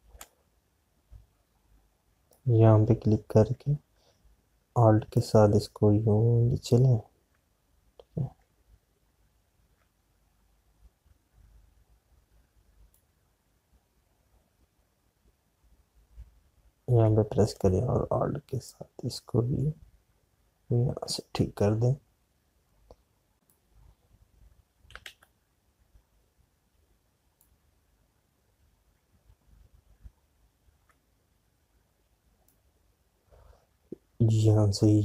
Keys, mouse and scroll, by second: 0.2 space, 0.5 click, 0.7 space, 3.6-26.6 drag, 26.6 ctrl+z, 29.0-35.0 drag.